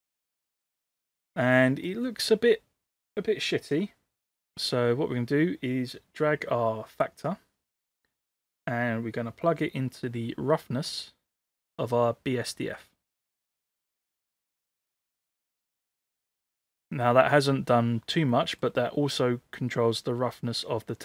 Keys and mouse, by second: 1.5 middle click, 7.0-13.3 drag, 16.2-16.8 middle drag, 18.3-18.7 middle drag.